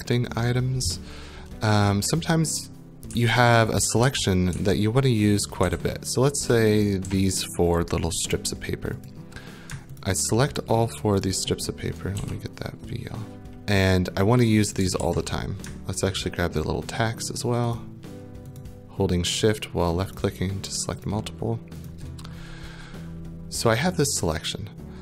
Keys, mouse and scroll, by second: 3.1-3.8 w, 4.1 w, 4.5 w, 5.6-7.0 typing, 7.6 right click, 9.1 click, 10.0 shift+click, 10.6 click, 11.2 shift+click, 12.2 v, 14.7 click, 15.0 ctrl+z, 16.2 shift+click, 17.0 click, 17.8 shift+click, 18.6 click, 19.4 shift+click, 20.2 shift+click, 21.1 shift+click, 21.9 shift+click.